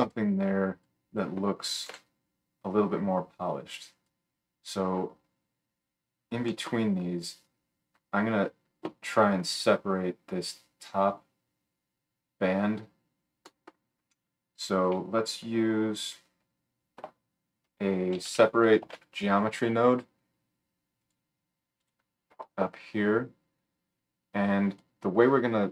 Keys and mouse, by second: 1.9 g, 3.3 click, 3.3-18.0 right drag, 17.0 F3, 18.0-25.7 drag, 23.9-25.7 middle drag, 23.9-25.7 right drag.